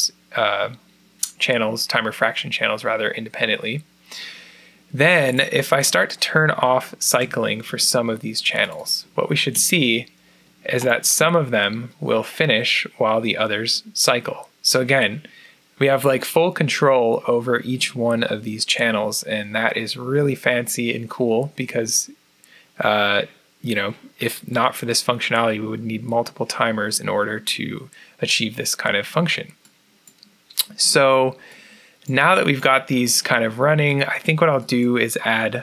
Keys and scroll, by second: 9.5 0.